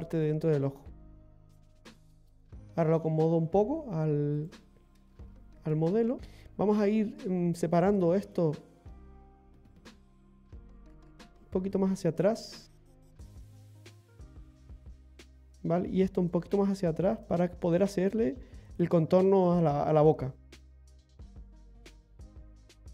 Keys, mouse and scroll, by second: 0.9 scroll up 2, 1.7 middle click, 2.3 scroll up 2, 3.0-3.6 scroll down 2, 3.6 scroll up 1, 4.4 right click, 5.7 g, 6.2 ctrl+z, 6.2-6.7 scroll down 1, 7.7 right click, 8.2 shift+right click, 9.1 right click, 9.6 right click, 10.3 g, 13.2 right click, 13.8 g, 15.2 middle click, 16.2 right click, 16.4 g, 17.7 right click, 17.8 g, 20.0-20.6 scroll up 3, 21.6 click, 22.7 ctrl+click.